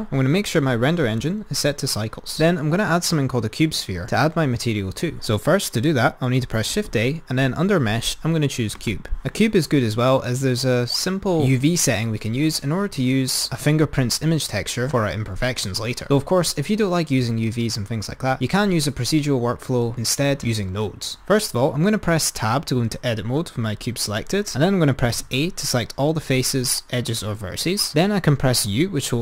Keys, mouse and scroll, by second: 0.5-2.2 drag, 6.8 shift+a, 22.8 Tab, 25.2 a, 28.6 u.